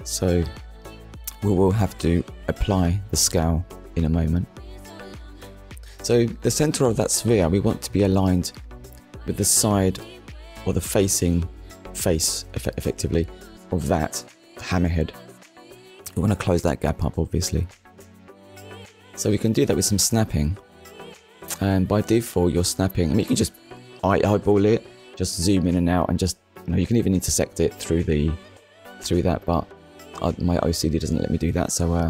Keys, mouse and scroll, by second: 5.2 Tab, 6.5 click, 7.2 click, 10.1 Delete, 11.5 click, 12.9 Tab, 13.3 middle click, 14.0 scroll down 1, 14.9 click, 15.2 middle click, 16.4 shift+middle click, 18.0-18.4 scroll up 1, 19.4 KP_1, 20.1 scroll up 1, 20.8 shift+middle click, 21.9 click, 23.9 scroll up 1, 24.5 scroll up 1, 25.3 scroll down 1, 26.3-26.6 scroll down 2, 26.7 shift+middle click, 27.5 click.